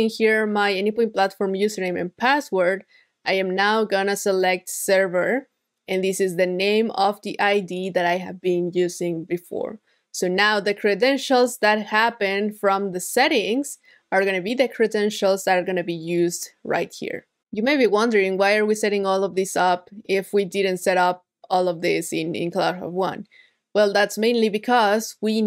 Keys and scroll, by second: 3.4 super+v, 11.0 super+s.